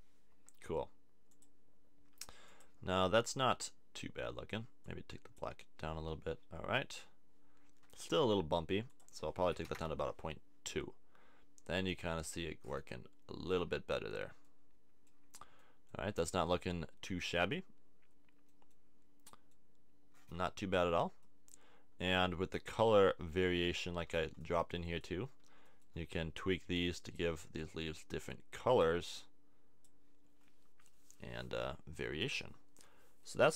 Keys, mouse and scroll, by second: 8.9 click, 12.6-14.6 middle drag, 30.9 middle click.